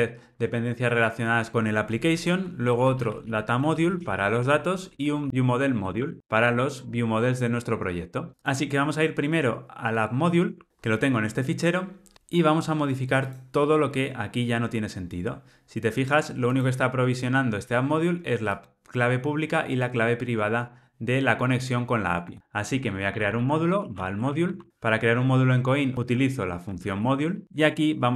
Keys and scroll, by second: 27.4 Escape.